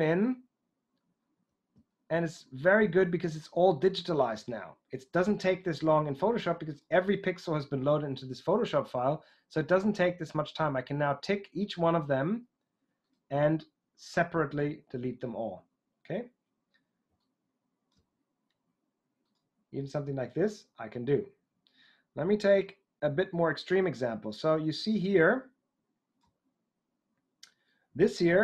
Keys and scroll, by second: 4.2 typing.